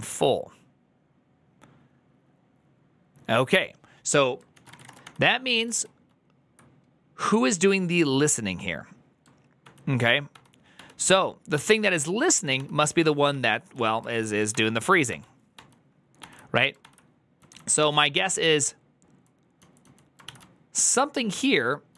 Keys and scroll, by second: 4.6-5.4 typing, 5.6 ctrl+u, 9.7 ctrl+d, 10.2 ctrl+d, 10.6 ctrl+d, 11.0 ctrl+d, 13.5 ctrl+d, 13.9 ctrl+u, 14.4 ctrl+d, 16.1 ctrl+d, 17.2 ctrl+d, 17.2-18.8 typing, 20.0-21.9 typing.